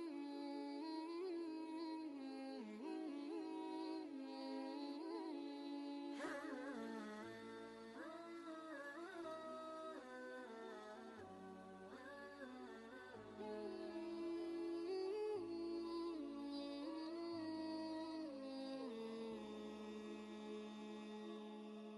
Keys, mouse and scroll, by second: 4.0 click, 6.0 ctrl+space, 6.1 ctrl+click, 6.5 ctrl+space, 6.7 typing, 6.9 click, 7.5 ctrl+space, 7.7 ctrl+click, 11.9 click, 13.0 click, 14.5 ctrl+space, 14.7 ctrl+click, 14.7-15.5 typing, 15.5 click, 15.6 ctrl+space, 15.8 ctrl+click, 17.4-19.9 drag.